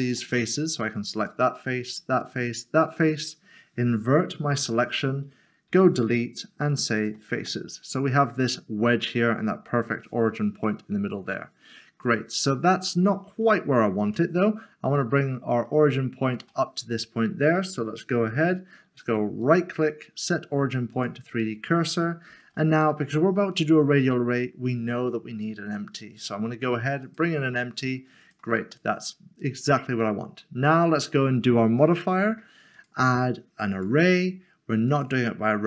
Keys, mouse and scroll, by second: 0.0 click, 0.5 middle click, 1.2 shift+click, 1.5 middle click, 2.2 shift+click, 2.7 scroll down 1, 5.7 x, 7.0 click, 7.8 middle click, 14.0 middle click, 19.4 right click, 20.9 right click, 22.3 a, 27.0 a, 27.2 click, 28.7 middle click, 30.9 click.